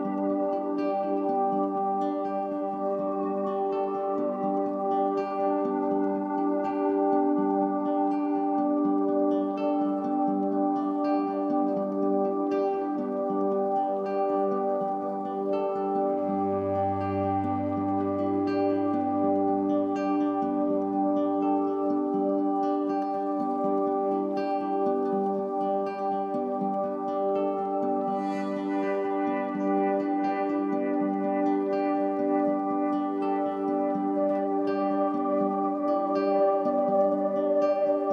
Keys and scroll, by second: 8.3 ctrl+shift+e.